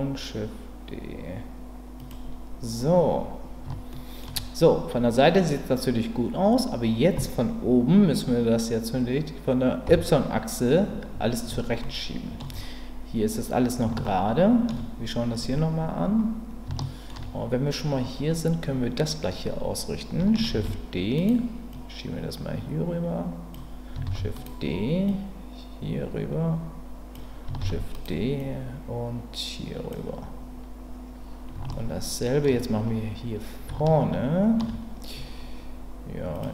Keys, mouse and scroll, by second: 2.0 click, 3.9 shift+middle click, 9.8 KP_7, 11.8 shift+middle click, 14.0 shift+middle click, 16.8 shift+middle click, 20.5 shift+d, 21.7-23.5 drag, 24.0 shift+d, 25.1-27.1 drag, 27.6 shift+d, 28.4-29.9 drag, 31.7 shift+middle click, 33.8 shift+middle click.